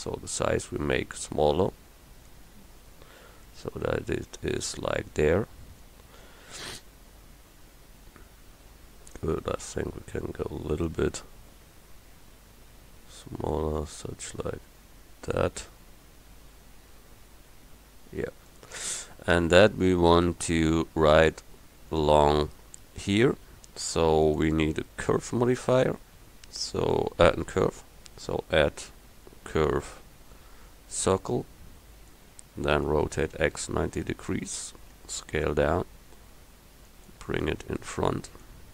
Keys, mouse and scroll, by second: 2.7-7.6 middle drag, 10.9-12.9 drag, 16.3 middle click, 33.0 r, 35.0 s.